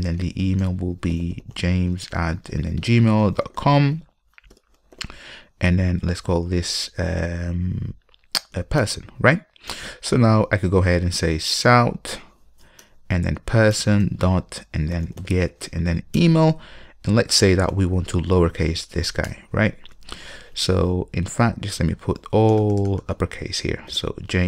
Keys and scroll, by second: 5.2 alt+super+v, 12.9 Return, 13.0 Return.